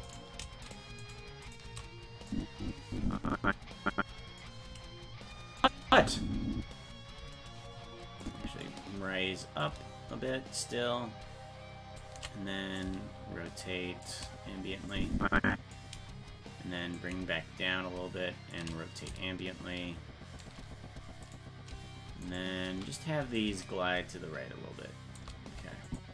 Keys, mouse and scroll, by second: 0.2 right click, 2.3-4.4 drag, 5.6 click, 5.9 space, 8.2 click, 9.6-12.0 shift+drag, 12.8-14.0 drag, 14.9 click, 16.9-18.5 shift+drag, 19.0-20.4 shift+drag, 21.3 right click, 22.3 shift+right click, 23.4-25.2 shift+drag, 25.9 click.